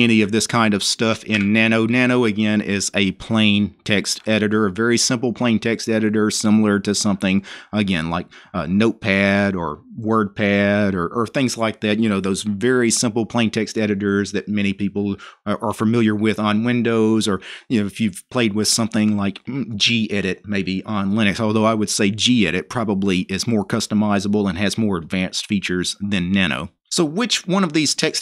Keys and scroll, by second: 0.6-1.4 typing.